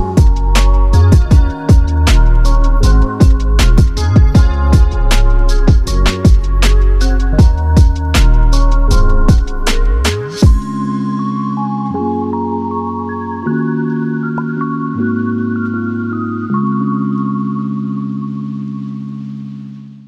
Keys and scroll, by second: 0.0-0.7 typing, 3.0-3.4 typing, 4.5-9.8 typing, 13.7 ctrl+f, 15.4 typing.